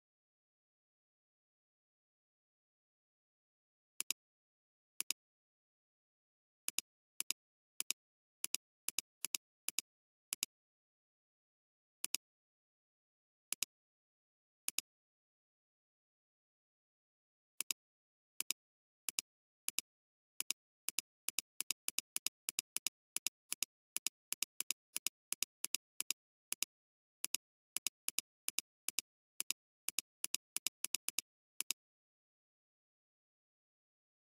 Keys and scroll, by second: 3.9 alt+space, 12.0 alt+space, 32.9 ], 33.4 ].